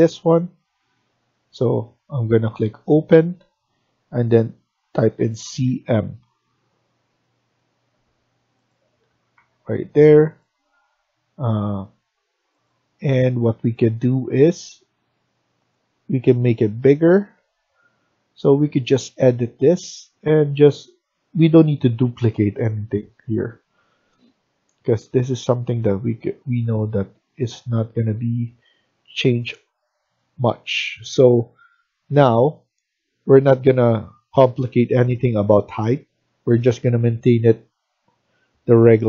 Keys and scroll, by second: 5.0-6.1 typing, 9.0 Escape, 9.2 Escape, 13.4 Escape.